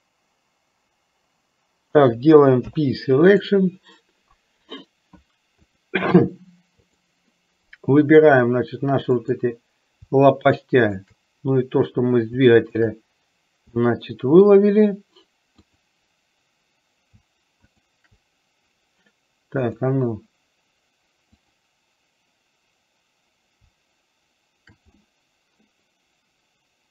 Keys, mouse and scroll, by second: 2.8 p, 5.8-7.4 drag, 9.3 click, 14.0 middle click, 15.8 click, 17.7 shift+click, 19.7 click, 21.5 click, 25.3-26.9 middle drag.